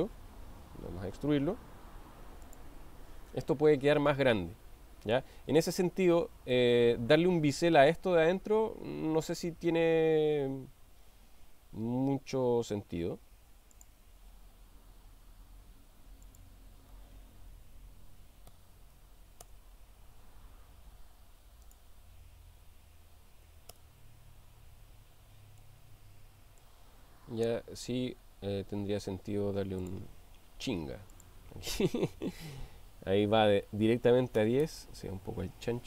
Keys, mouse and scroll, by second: 2.6 click, 3.4-5.3 middle drag, 5.6 click, 6.7-7.9 middle drag, 13.7 click, 16.4-20.6 drag, 21.6-25.2 drag, 25.6-26.8 middle drag, 31.3-35.6 drag.